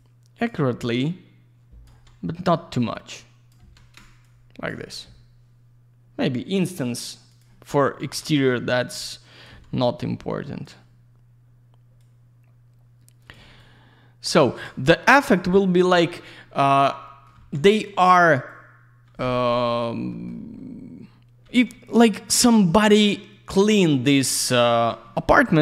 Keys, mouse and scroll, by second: 0.0 click, 0.8 click, 1.8 e, 2.8 click, 4.2 shift+click, 6.7 click, 7.3 click, 7.4 click, 8.0 e, 8.8 click, 10.0 click, 12.0 click, 13.6 shift+click, 15.5 click, 15.6 click, 15.9 middle click, 17.0 middle click, 18.5 click, 19.2 Escape, 19.4 right click, 19.5 click, 20.1 middle click, 20.3 middle click, 20.6-21.0 scroll up 1, 21.4 e, 22.1 click.